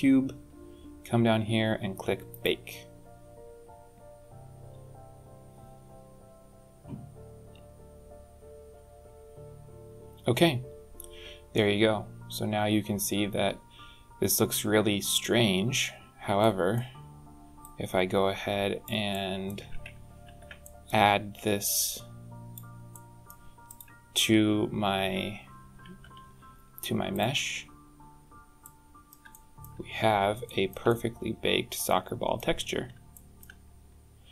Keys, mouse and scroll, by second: 0.9-1.4 scroll up 2, 2.1 click, 16.2 middle click, 17.4 click, 18.9 middle click, 20.1 ctrl+t, 20.4 middle click, 21.6 click, 22.7 middle click, 23.5 click, 25.9 h, 27.3 click, 28.4 middle click, 29.1 shift+middle click, 29.7-30.0 scroll up 4, 30.3 shift+middle click, 30.7 middle click, 32.4-32.8 scroll up 4, 32.9 shift+middle click, 33.5-34.0 scroll up 3, 34.2-34.3 scroll down 3.